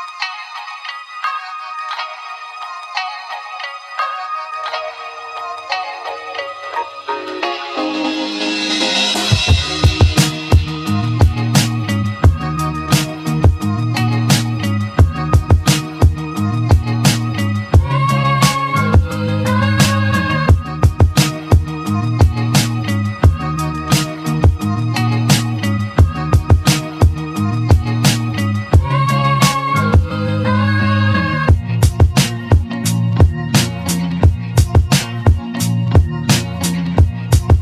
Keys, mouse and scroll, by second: 0.0-0.5 scroll down 1, 0.5-1.5 middle drag, 1.5 scroll down 1, 2.5-5.9 middle drag, 7.0-8.1 shift+middle drag, 8.1 shift+a, 23.9-25.6 shift+middle drag, 27.3 s, 33.1-33.8 scroll up 4, 34.2-36.8 shift+middle drag.